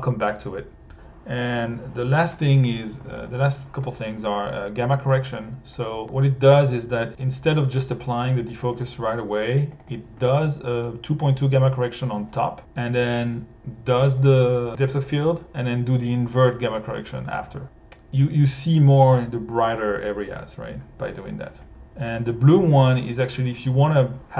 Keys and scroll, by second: 8.3 1.